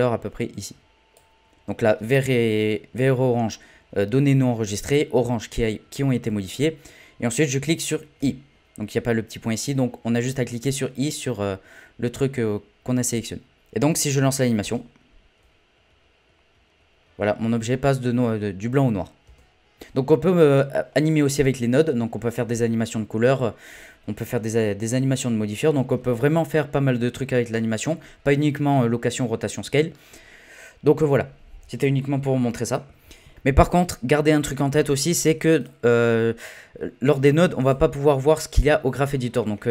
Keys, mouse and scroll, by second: 13.6-14.6 drag, 14.6 space, 19.2 space, 20.0 scroll down 8, 20.1-20.5 scroll up 1, 20.5 click, 20.9-21.3 scroll down 6, 21.3 middle click, 22.2-24.1 scroll up 1, 24.1-24.5 scroll up 1, 35.6-39.0 drag, 39.0-39.4 scroll down 7, 39.4-39.7 middle drag.